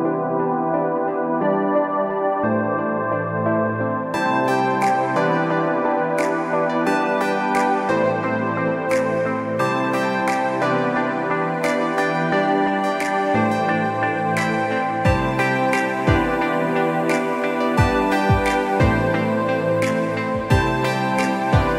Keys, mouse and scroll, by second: 1.5 click, 10.3-11.2 scroll down 1, 13.2-13.7 scroll down 1, 15.0 click, 20.1 click.